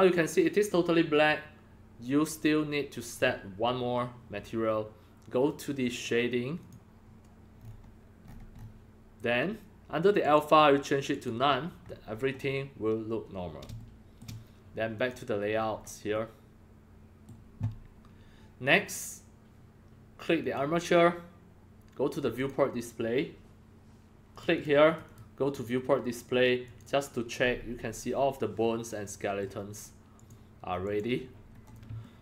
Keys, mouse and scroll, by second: 6.6 click, 7.5-8.2 scroll up 5, 8.2-8.8 scroll up 10, 10.2 click, 11.1 click, 11.8 scroll up 1, 11.9 scroll, 11.9 scroll up 1, 12.1-12.5 scroll down 1, 13.1-15.0 middle drag, 14.9 click, 15.5 scroll up 4, 15.6 middle drag, 16.3-17.2 middle drag, 18.7 click, 19.0-24.4 drag, 24.5 click, 24.8 click, 25.0 click, 25.5 click, 26.6 click, 27.4 scroll, 27.5 middle drag, 29.2 middle click, 30.1 click, 30.8 click, 31.2 middle click, 32.0-32.2 shift+middle drag.